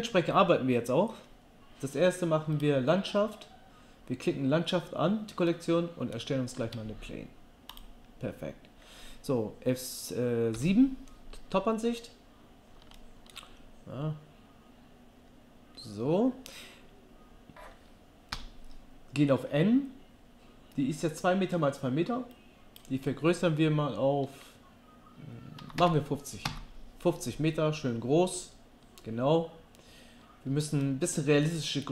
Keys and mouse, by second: 2.6-6.6 drag, 6.6 shift+a, 10.5 KP_7, 18.3 n, 22.3-28.4 middle drag, 28.8 middle click.